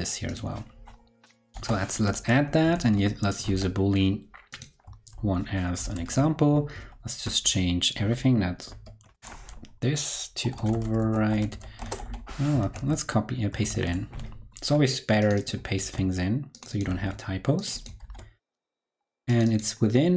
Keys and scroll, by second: 2.4 super+Right, 2.7 shift+super+Left, 3.4 super+c, 5.1 super+v, 6.0 super+Left, 8.6 alt+super+e, 12.9 super+v, 13.6 super+z, 15.7 super+c, 16.9 super+v, 17.9 super+v.